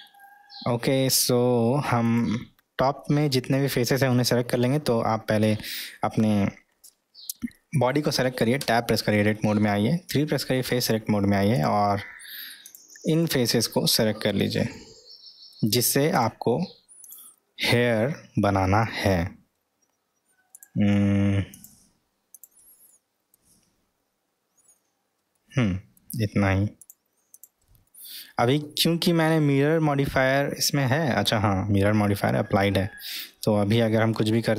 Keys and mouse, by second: 2.1 click, 8.7 Tab, 10.1 3, 11.5 click, 12.7 drag, 13.8-15.6 middle drag, 16.1 click, 17.1 click, 17.7-18.9 middle drag, 20.5 click, 21.5 drag, 22.9-23.3 middle drag, 25.4-26.0 middle drag, 26.8 click, 27.3 click, 27.8-34.1 middle drag.